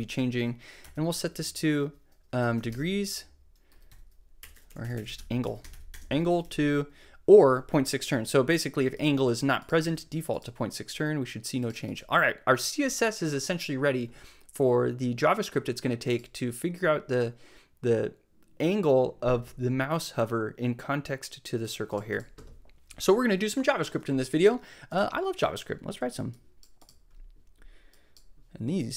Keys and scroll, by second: 0.0 Left, 0.8 -, 2.1-6.4 typing, 7.5 super+v, 9.8 super+s.